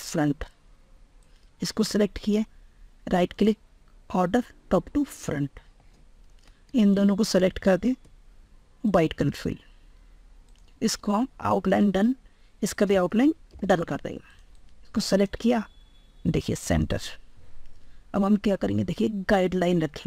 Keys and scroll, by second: 12.8 ctrl+r.